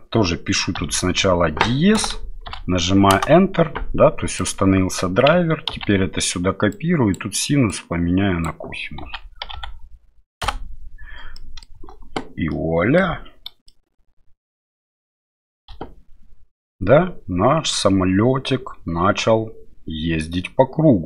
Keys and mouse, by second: 4.5-11.1 drag, 11.4 middle click, 11.8 space, 12.5 middle click, 13.7-15.4 middle drag, 15.7 KP_7.